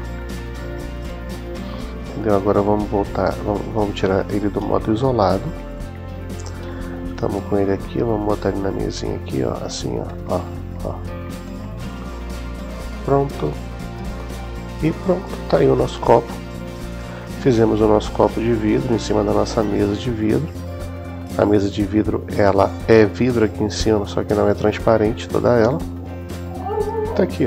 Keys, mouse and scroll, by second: 4.1 /, 8.1-12.5 drag, 15.9-17.1 middle drag, 15.9 typing, 18.7 typing, 19.5-20.8 middle drag, 21.5 typing.